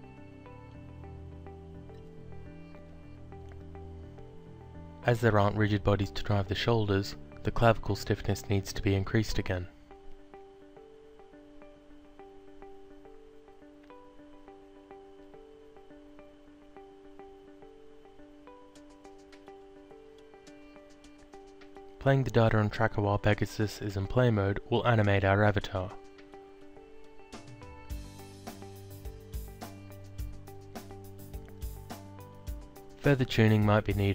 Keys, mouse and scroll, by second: 1.7 alt+click, 2.5 alt+middle click, 3.4 alt+click, 5.4 click, 7.2 click, 7.9-9.2 typing, 9.5 Return, 10.9 click, 12.2 click, 13.0 ., 13.5 9, 13.7 alt+click, 14.7 alt+click, 16.8 alt+Tab, 19.0 click, 21.1 click, 23.2 click, 27.1 click, 29.9 click, 30.4 alt+click, 31.6 alt+click, 32.8 alt+click.